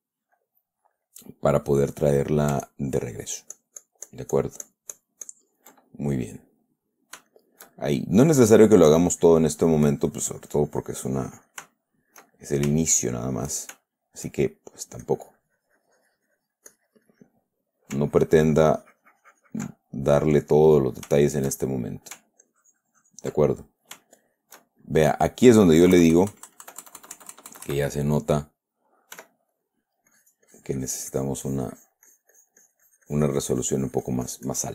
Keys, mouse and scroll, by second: 0.2 ctrl+middle click, 1.0 middle click, 2.5 middle click, 3.0-6.6 ctrl+drag, 6.8 ctrl+middle click, 7.7 shift+middle click, 8.8-12.1 shift+drag, 12.1 shift+middle click, 12.7 shift+middle click, 13.2 shift+middle click, 14.2 shift+middle click, 15.4-18.3 drag, 18.5-20.6 ctrl+drag, 20.8 ctrl+middle click, 21.6 shift+middle click, 22.8 ctrl+click, 23.8 ctrl+middle click, 24.4 ctrl+shift+middle click, 25.2 shift+middle click, 26.3 KP_Add, 29.5 f, 29.9 click, 30.5-34.7 drag.